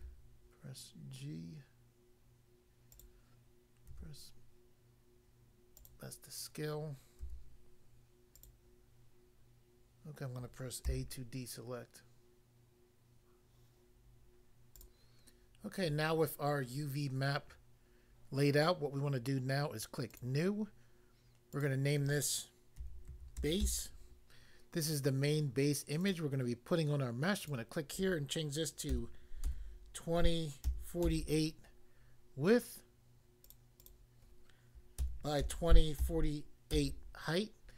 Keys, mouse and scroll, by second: 2.9 click, 3.9 s, 5.8 click, 5.9 click, 7.2 g, 8.3 click, 10.9 a, 14.8 click, 20.1 click, 20.2 click, 21.6 click, 21.7 click, 22.8-23.6 typing, 26.1 click, 27.5 click, 28.9 2, 29.4 0, 30.6-31.1 typing, 33.5 click, 33.5 click, 33.8 click, 33.9 double click, 35.0-36.8 typing.